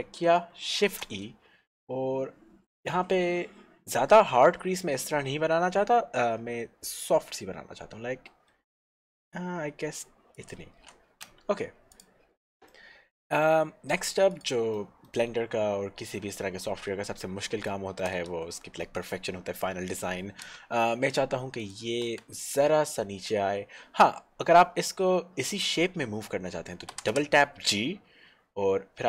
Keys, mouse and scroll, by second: 0.2 scroll up 1, 1.0 shift+e, 10.3 click, 11.4 Tab, 11.9 click, 12.2-12.6 scroll down 1, 12.7 middle click, 14.3 click, 14.9 middle click, 15.9-16.5 scroll up 1, 17.0 Tab, 17.8 shift+middle click, 18.3 middle click, 18.6 middle click, 20.5 Tab, 27.1 g.